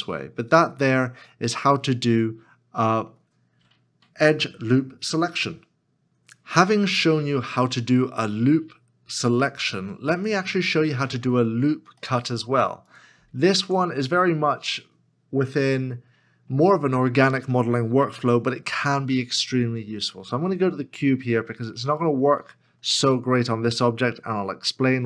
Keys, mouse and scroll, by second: 10.8 Return, 10.8 middle click, 12.0 shift+middle click, 13.8 Tab, 20.3 KP_Decimal, 21.1-21.9 scroll down 1, 21.9 middle click, 22.6-24.9 scroll down 1.